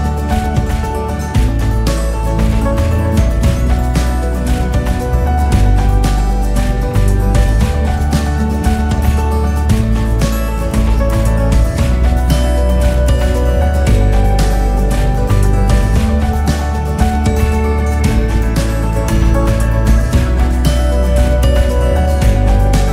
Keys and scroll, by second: 16.0 ctrl+s.